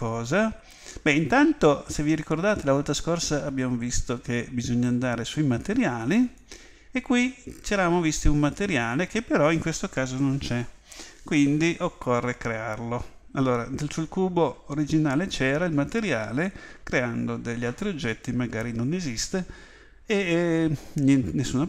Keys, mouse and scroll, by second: 6.1 click.